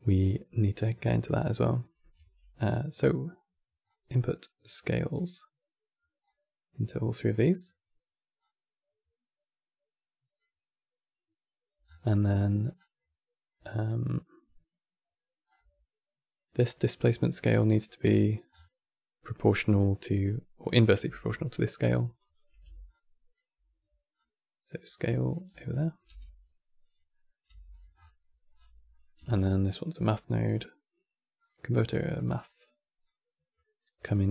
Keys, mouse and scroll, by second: 1.9 q, 3.5-6.0 drag, 8.1 click, 11.7 scroll up 1, 11.8-12.2 middle drag, 12.2-12.7 scroll up 5, 12.7-15.2 middle drag, 15.2-15.9 scroll up 7, 18.2-18.5 scroll down 8, 19.1-21.9 middle drag, 21.9 shift+right click, 22.6 alt+click, 23.8 click, 24.9 click, 25.3 scroll down 3, 25.4 middle click, 25.8 g, 26.8-27.2 middle drag, 27.2 g, 27.6 scroll up 12, 27.9 middle click, 28.3 scroll up 5, 28.6 middle click, 29.0 shift+a, 32.7 click, 33.8-34.3 drag.